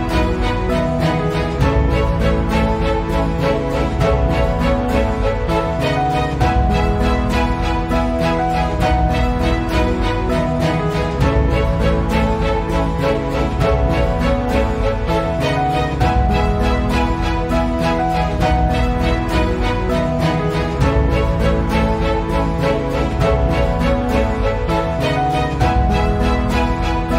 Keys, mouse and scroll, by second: 0.9 click, 5.5 click, 14.2 shift+click, 19.3 ctrl+z, 19.8 click, 20.9 ctrl+alt+c, 21.1 click, 21.6 ctrl+alt+v, 24.0 click, 25.3 ctrl+e, 26.5 click.